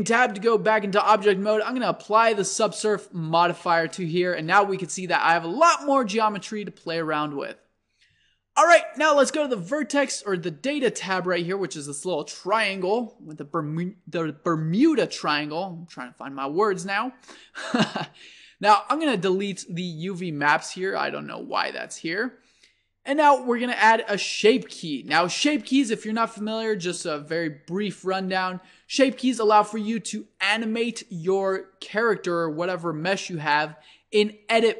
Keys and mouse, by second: 0.3 Tab, 3.3 click, 4.6 Tab, 5.6-10.1 drag, 6.9 Tab, 10.4 click, 15.9-17.7 drag, 21.5-23.2 drag, 24.5-26.4 drag.